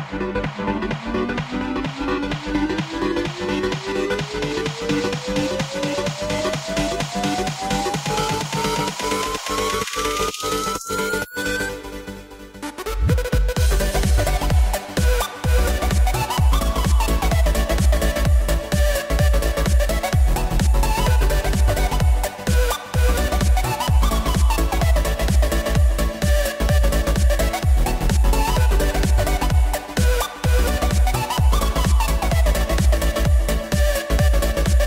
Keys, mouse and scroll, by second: 0.1 shift+a, 1.6 s, 5.4 click, 6.1-7.3 drag, 9.7 z, 10.9 z, 11.9-13.9 middle drag, 13.9-14.7 scroll down 1, 14.7 click, 15.6 KP_0, 18.3 g, 19.3 click, 19.7 s, 21.6 KP_1, 22.5-23.2 scroll up 3, 23.2 click, 25.5 KP_0, 27.4 click, 29.6 drag, 30.8 click, 31.6-34.7 drag.